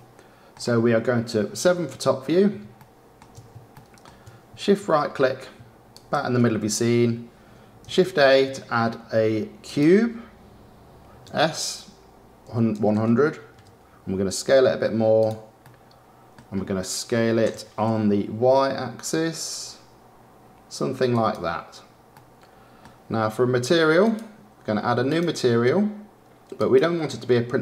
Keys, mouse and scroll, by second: 0.5-1.1 scroll down 10, 1.5 KP_7, 2.1 scroll down 7, 2.7-4.8 shift+middle drag, 4.8-5.3 scroll down 6, 5.9 shift+right click, 8.0 shift+a, 11.2 s, 14.4 s, 15.7-17.4 middle drag, 17.4 s, 22.2-24.0 middle drag, 24.0 click, 25.0-27.6 drag.